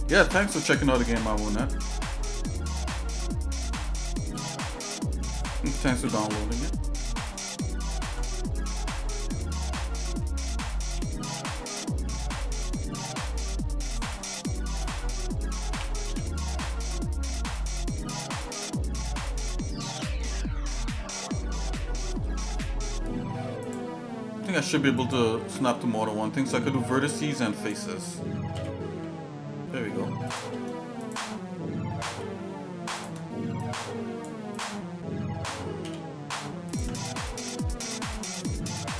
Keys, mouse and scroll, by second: 1.6 click, 4.3 g, 6.0 e, 8.3 shift+middle click, 8.9 shift+middle click, 9.4 middle click, 10.0 shift+middle click, 11.3 e, 14.3 shift+middle click, 14.9 middle click, 16.1 e, 20.3 shift+middle click, 23.7-25.7 drag, 26.0 middle click, 26.5 shift+middle click, 27.6 click, 28.5 g, 31.0 click, 32.1 g, 33.6 click, 35.8 g, 37.1 middle click, 38.1 shift+middle click, 38.5 middle click.